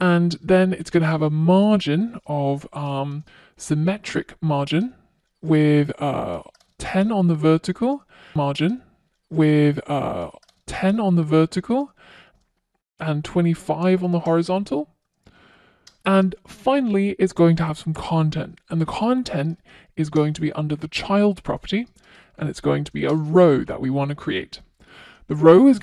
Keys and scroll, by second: 0.0 Return, 3.2 Return, 10.3 Return, 14.7 Return, 20.6 Return.